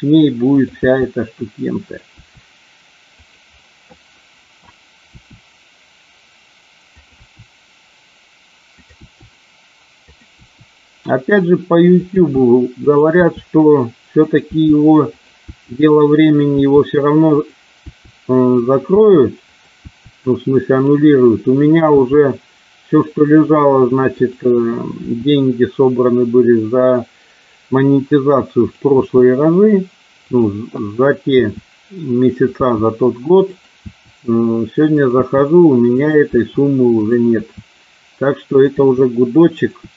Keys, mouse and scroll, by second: 0.5 click, 0.7 e, 2.1 e, 3.1 click, 5.1 e, 6.8 click, 7.1 e, 8.7 click, 9.0 e, 10.0 click, 10.2 e, 12.0 click, 12.1 e, 12.7 click, 13.2 e, 14.2 click, 14.5 e, 15.0 click, 15.5 e, 16.1 click, 16.6 e, 17.2 click, 17.8 e, 18.5 click, 18.8 e, 19.3 click, 19.7 e, 20.6 click, 21.9 e, 24.1 click, 25.0 e, 28.6 click, 28.9 e, 30.2 click, 31.2 e, 32.2 click, 32.5 e, 33.4 click, 33.8 e, 34.8 click, 35.2 e, 35.8 click, 36.4 e, 36.8 click, 37.4 e, 38.5 click, 38.7 e, 39.8 e.